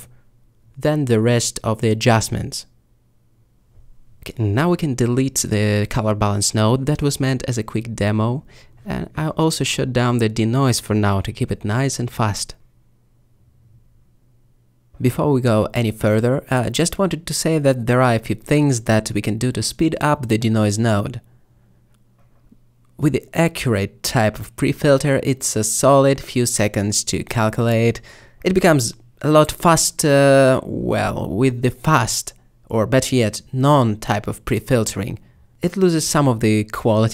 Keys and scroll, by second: 5.1 ctrl+x, 9.5 m, 26.1 m.